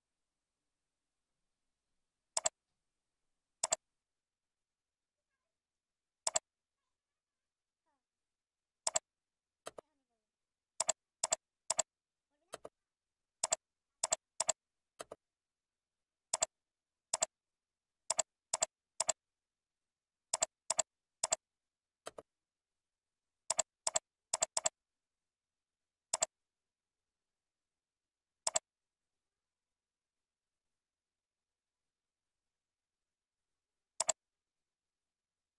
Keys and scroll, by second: 19.7 ctrl+c, 25.3 ctrl+v.